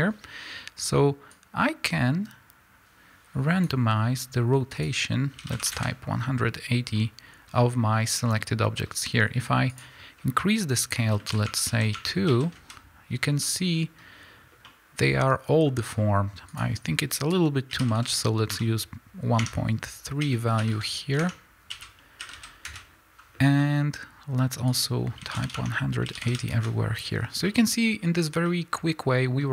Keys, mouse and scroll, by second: 1.7-7.0 drag, 6.0 KP_Enter, 7.0-11.7 middle drag, 11.7-13.5 drag, 12.8 KP_Enter, 13.5-19.6 middle drag, 19.6-23.6 drag, 22.9 KP_Enter, 23.6-25.8 middle drag, 25.8-27.5 drag, 26.7 KP_Enter, 27.5-29.5 middle drag.